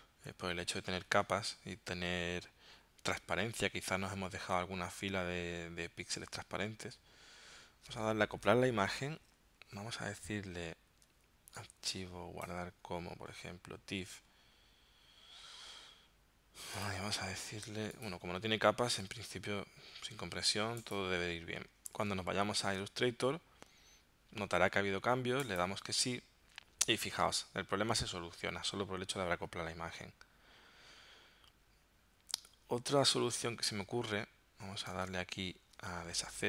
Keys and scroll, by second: 22.0 super+Tab, 35.0 super+Tab, 36.3 alt+super+z.